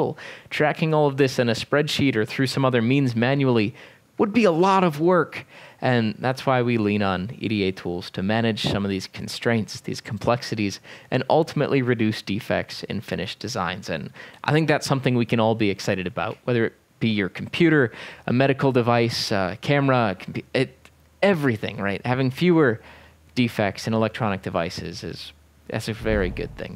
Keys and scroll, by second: 25.9 e, 26.0 e.